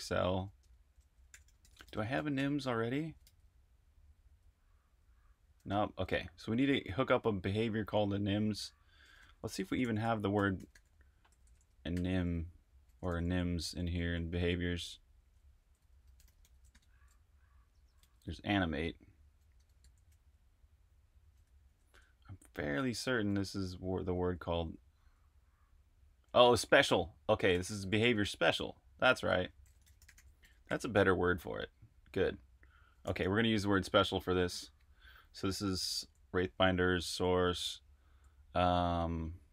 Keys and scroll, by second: 0.6-5.3 typing, 8.9-16.7 typing, 18.0 n, 19.5 typing, 21.7 super+`, 23.0-25.0 typing, 27.2-27.9 typing, 28.1 super+`, 29.1-30.9 typing, 32.8-33.5 typing, 35.4-37.9 typing.